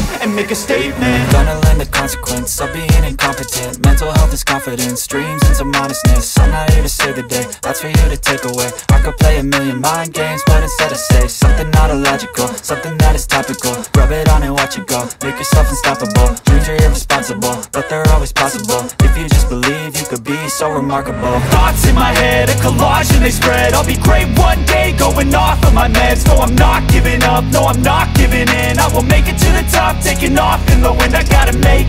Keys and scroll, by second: 8.5 alt+space, 22.7 [, 24.6 ctrl+z, 31.8 [.